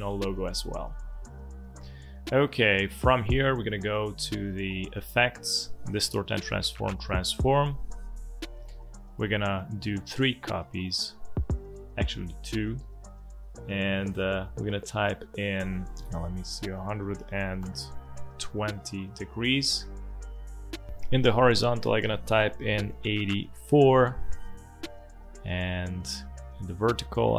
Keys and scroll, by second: 16.4-17.6 typing, 23.2 8, 23.5 4.